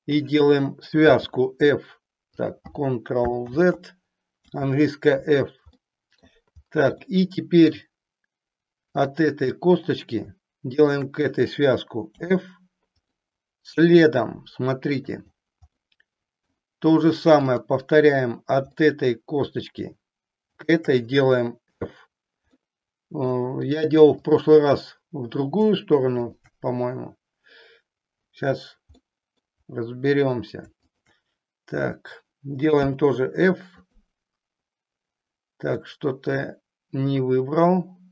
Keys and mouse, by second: 1.0 g, 3.4 ctrl+z, 4.4 f, 5.8 middle click, 7.2 middle click, 12.2 f, 13.2-15.3 middle drag, 15.8 middle click, 17.4 click, 18.8 middle click, 20.4 shift+click, 21.9 f, 22.5 middle click, 29.0 middle click, 32.7 f, 35.8-38.1 middle drag.